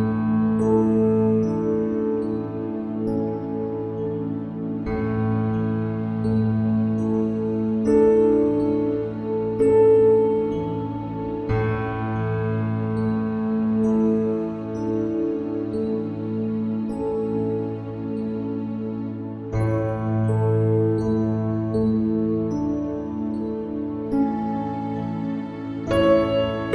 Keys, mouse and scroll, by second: 1.0 Tab, 3.0 ctrl+r, 6.4 ctrl+r, 10.1 ctrl+r, 12.9 ctrl+r, 19.0-26.7 drag, 25.9 e.